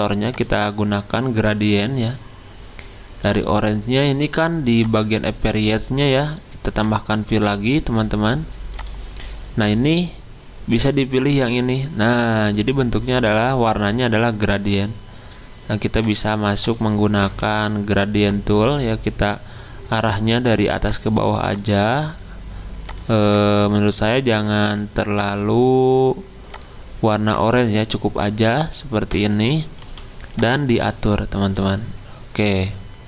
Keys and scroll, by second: 17.4 g, 29.8 g.